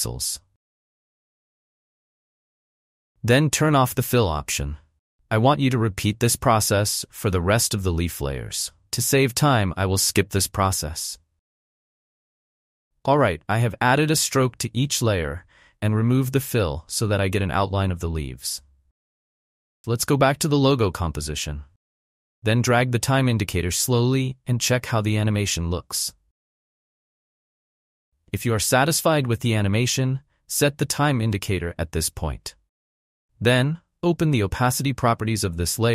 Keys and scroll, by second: 0.2 5, 1.3 Return, 19.7 space, 35.6 t.